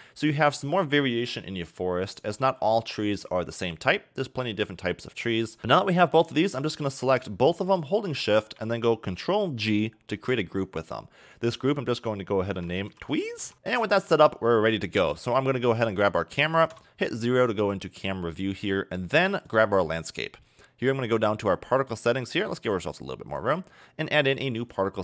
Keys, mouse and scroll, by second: 0.2 click, 5.2 click, 5.6 click, 6.5 click, 8.1 shift+click, 10.1 ctrl+g, 11.2-13.4 drag, 13.4 s, 15.6 click, 16.7 KP_0, 17.5 scroll up 2, 18.0 a, 19.5 click, 22.4 click, 24.6 click.